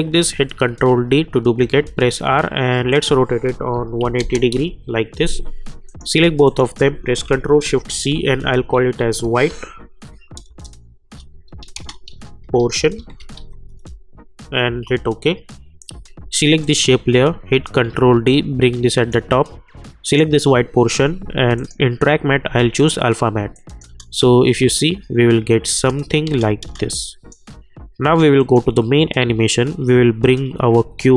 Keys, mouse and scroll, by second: 0.7 ctrl+d, 1.8 r, 2.9 click, 4.5 Return, 5.8 click, 7.8 ctrl+shift+c, 8.5-13.8 typing, 14.6 Return, 16.6 click, 17.7 ctrl+d, 18.2-20.0 drag, 23.8 space, 25.9 space, 26.9-28.4 drag.